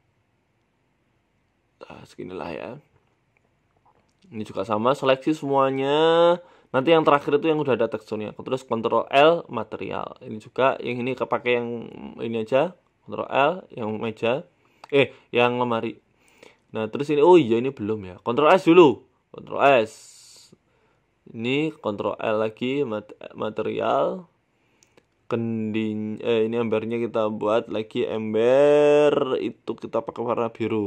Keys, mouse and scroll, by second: 20.4 click, 20.8 middle click, 21.4 shift+right click, 22.7 ctrl+l, 23.9 scroll down 3, 24.2 middle click, 25.0 scroll down 1, 25.3 middle click, 26.1 middle click, 26.4 right click, 27.0 click, 27.2 click, 29.5 click.